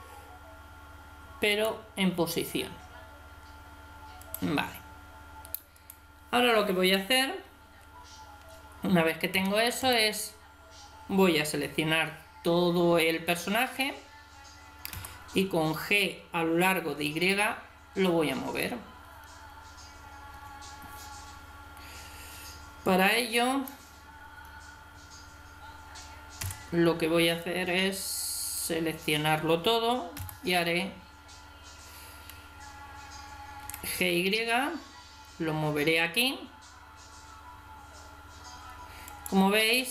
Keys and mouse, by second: 4.2-7.4 right drag, 9.3 a, 9.8 a, 14.9 g, 26.4 b, 30.2 g.